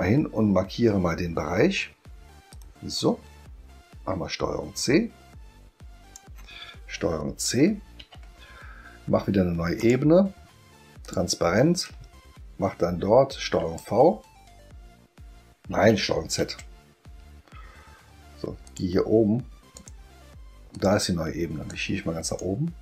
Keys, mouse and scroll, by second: 2.5-6.1 drag, 8.0 ctrl+c, 9.8 click, 11.0 click, 13.6 ctrl+v, 16.4 ctrl+z, 18.7 click, 19.7 click, 20.7 click, 21.7 click.